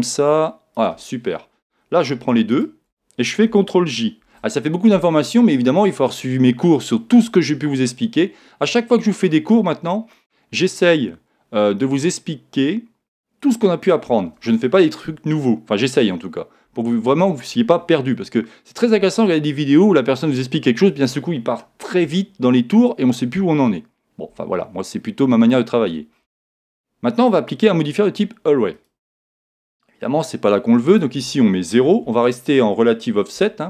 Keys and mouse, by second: 2.5-4.2 right drag, 4.2 ctrl+j, 18.4-20.3 middle drag, 24.6-27.2 middle drag, 27.2 click, 30.9 click.